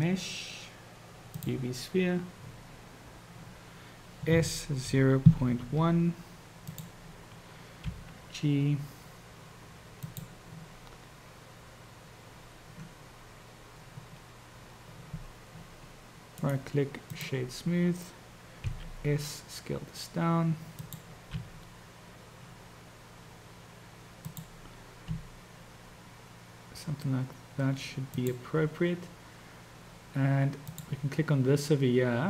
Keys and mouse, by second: 4.4 s, 8.0 g, 16.5-17.6 drag, 18.8 s, 21.5 g, 25.2 s, 30.6 click.